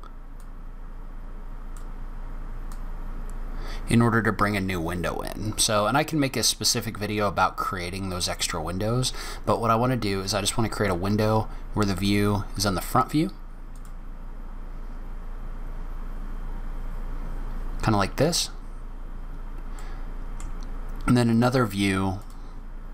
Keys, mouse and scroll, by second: 0.3 click, 9.4 click, 11.9 click, 15.0-15.8 scroll down 4, 15.8-16.3 scroll down 3, 16.2-17.3 scroll up 6, 17.3-18.9 scroll down 1, 19.7 middle click, 20.6 scroll up 1, 21.2-22.1 scroll down 1, 22.1 click, 22.1-22.7 scroll down 1.